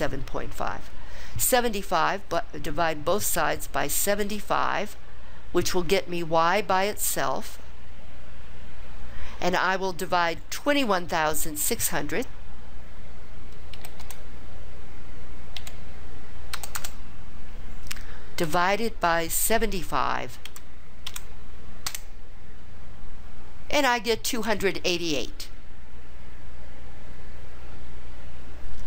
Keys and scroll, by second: 13.9 2, 14.2 1, 15.7 6, 16.7 0, 16.9 0, 20.6 7.